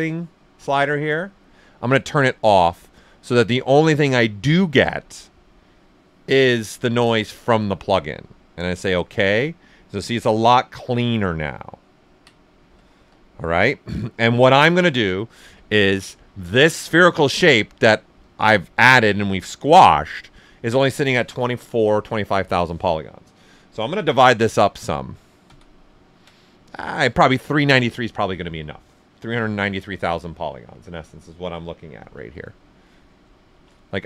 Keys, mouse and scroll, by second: 10.6 click, 10.7 alt+right click, 12.2 ctrl+alt+right click, 14.5-18.1 alt+right drag, 18.1 click, 23.8 click, 24.4 ctrl+d, 31.8 ctrl+d, 32.1 shift+m, 33.5 shift+m.